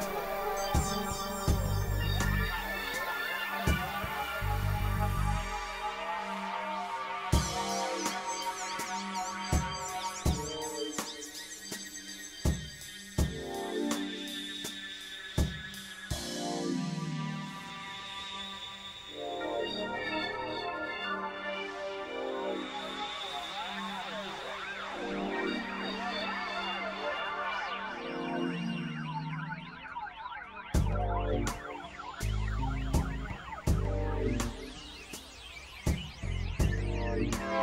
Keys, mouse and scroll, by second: 0.2 click, 1.3 click, 2.3 click, 3.1 click, 3.5 click, 4.1 click, 6.0 click, 9.3 click, 10.0 click, 10.6 click, 11.3 click, 12.5 ctrl+z, 12.7 click, 14.0 click, 15.8 click, 17.9 click, 19.3 click, 20.8 click, 22.2-23.1 drag, 28.6 click, 29.6-30.3 drag, 31.2 click, 32.1 f, 32.5-33.9 drag, 34.5 click, 36.1 click, 36.8-37.6 drag.